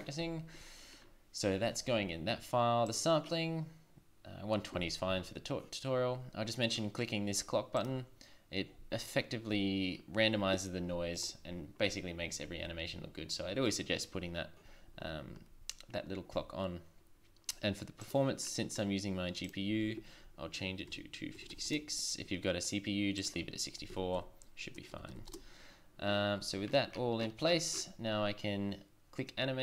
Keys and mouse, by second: 1.0-6.1 drag, 7.7-9.9 drag, 11.2 click.